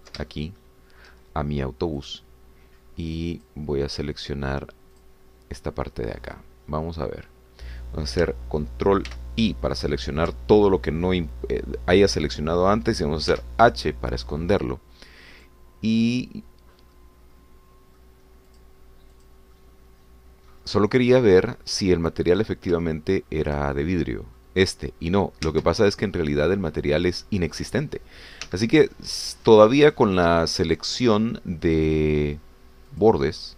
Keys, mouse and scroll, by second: 0.1-1.3 ctrl+middle drag, 1.4 ctrl+shift+middle click, 3.0 click, 4.4 click, 6.1 click, 10.1 ctrl+i, 14.3 h, 17.3-17.7 scroll down 4, 17.9-19.2 middle drag, 19.6 click, 20.3 click, 20.6-23.0 middle drag, 23.4-23.7 scroll up 1, 23.9 shift+middle click, 24.8-26.5 shift+middle drag, 26.9 Tab, 29.4 2, 30.1 scroll up 1, 31.0 shift+click, 31.8 shift+click, 32.7 shift+click.